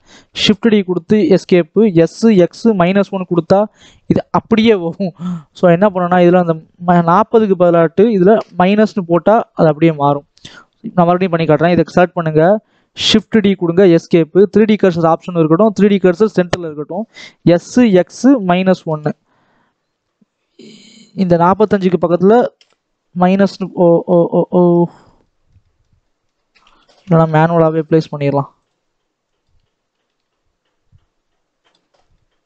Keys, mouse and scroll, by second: 0.5 shift+d, 1.7 s, 8.5 click, 10.1 click, 12.9 shift+d, 17.1 s, 22.6-23.6 drag, 24.7 ctrl+z, 24.9 scroll up 1, 25.1-26.5 middle drag, 26.5-26.8 scroll up 1, 26.8 r, 29.5 click, 29.7 r, 31.9 scroll down 1, 32.1-32.4 middle drag.